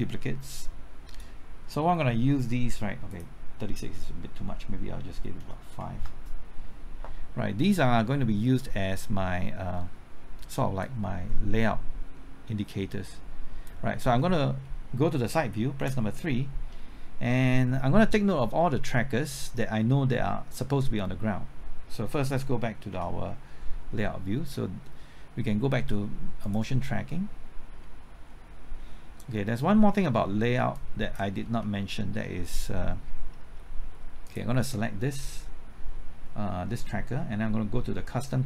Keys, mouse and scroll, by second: 5.4 KP_5, 6.0 KP_Enter, 15.8 KP_3, 22.9 KP_0.